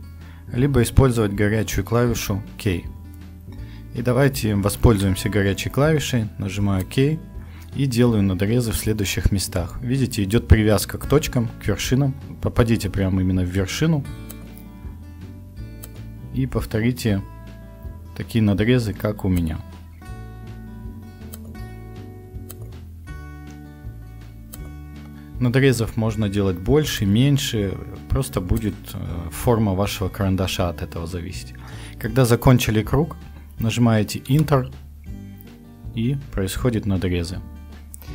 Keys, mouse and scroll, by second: 2.1 k, 4.9 k.